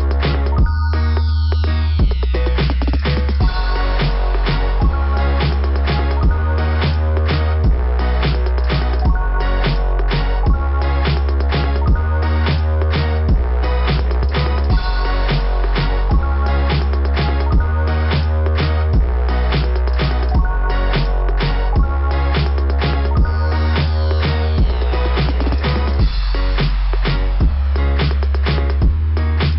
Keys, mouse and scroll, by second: 0.7 click, 6.4 click, 7.8 click, 8.4 scroll up 2, 12.5 scroll down 1, 14.2 click, 18.5 typing, 18.7 click, 20.2 ], 23.1 typing, 25.9 click, 26.1 [, 26.4 click, 26.4 [, 26.8 [.